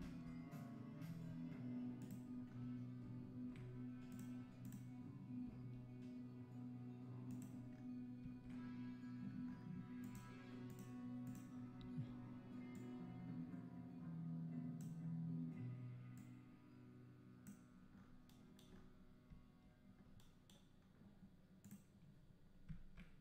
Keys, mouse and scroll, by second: 0.0 g, 2.5 scroll down 1, 4.6 click, 5.6 g, 7.7 scroll down 2, 8.3 scroll down 1, 10.7 click, 11.2 click, 11.6 scroll down 2, 12.8 click, 17.9 scroll up 4, 21.8 click.